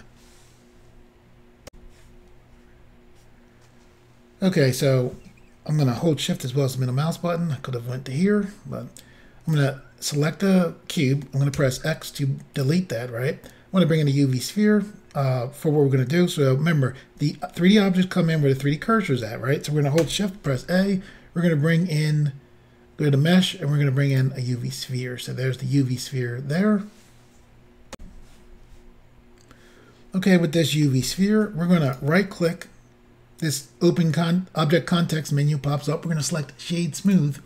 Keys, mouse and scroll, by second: 1.7 Insert, 6.3 shift+middle click, 9.5 click, 11.6 x, 12.6 click, 20.5 a, 24.2 click, 28.0 Insert, 31.9 right click, 37.2 click.